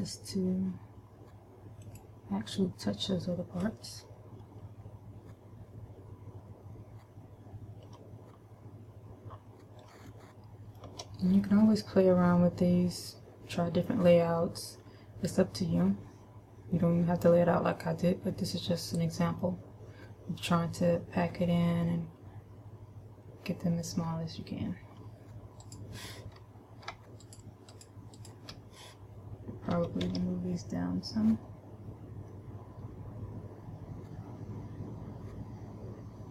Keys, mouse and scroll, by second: 2.4 click, 10.7 shift+middle click, 11.9 middle click, 15.3-15.9 scroll down 2, 15.9-16.6 scroll up 1, 19.1 middle click, 26.0 right click, 27.8 shift+right click, 28.2 shift+right click, 28.7 shift+right click, 30.3 g.